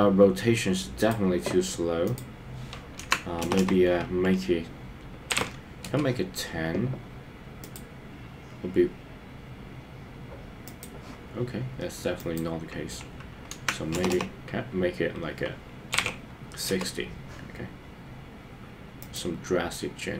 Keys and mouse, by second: 2.1-5.9 drag, 3.7 BackSpace, 7.7 click, 10.7 click, 12.1-16.8 drag, 14.2 BackSpace.